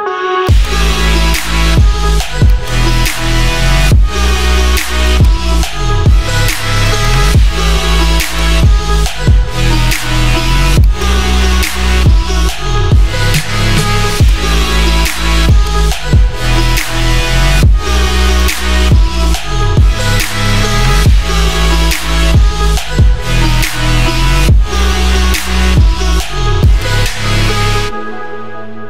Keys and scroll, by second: 3.9 ctrl+j.